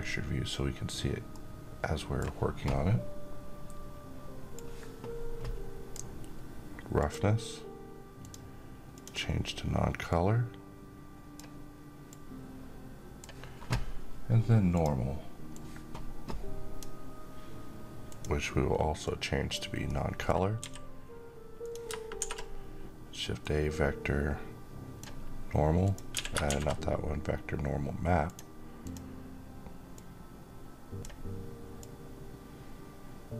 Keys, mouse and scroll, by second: 0.8-1.7 middle drag, 4.0-5.6 drag, 19.3-20.0 middle click, 20.1 g, 21.1 click, 21.6 a, 22.9-24.8 drag, 25.6 x, 25.9 shift+a, 27.7-30.7 drag.